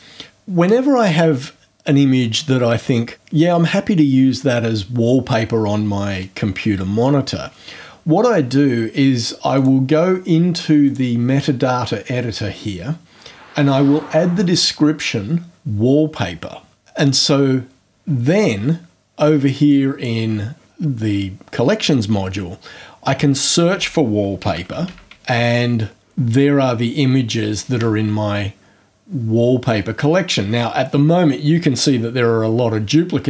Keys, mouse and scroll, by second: 9.5 click, 10.8 click, 19.7 click, 24.0-25.6 typing.